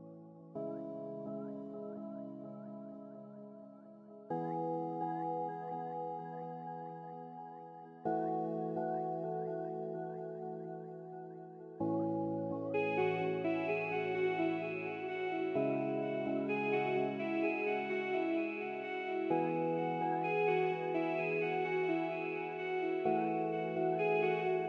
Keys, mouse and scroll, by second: 5.0 middle click, 14.1 scroll up 1, 14.4 scroll down 1, 15.1 middle click, 16.4 scroll down 1, 16.5 middle click, 17.2-17.6 scroll down 1, 23.6 scroll down 1, 24.3 scroll up 1.